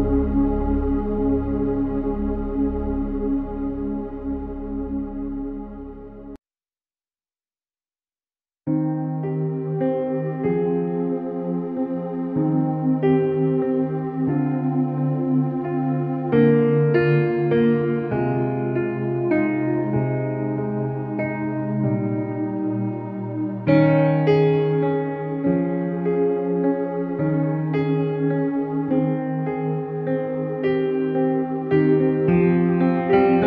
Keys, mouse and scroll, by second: 9.1 space, 9.4 click, 9.5 space, 11.7 click, 12.3 space, 12.5 click, 12.6 space, 12.9 alt+click, 13.7 alt+click, 14.5 click, 18.6 space, 18.8 click, 19.0 space, 19.5 ctrl+-, 20.5 click, 21.9 space, 22.2 click, 22.3-22.6 space, 23.9 ctrl+=, 24.5 space, 24.6 click, 24.8 space, 25.3 ctrl+=, 25.9 shift+w, 26.4 alt+click, 28.4 l, 28.8 ctrl+=, 29.4 alt+click, 30.3 click, 31.6 alt+click, 32.9 click.